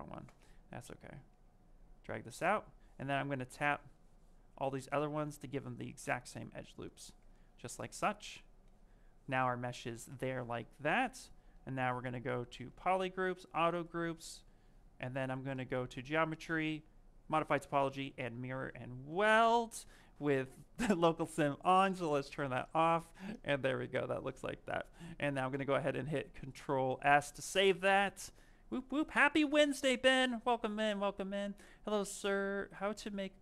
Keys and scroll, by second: 19.1 ctrl+z, 25.4 ctrl+s.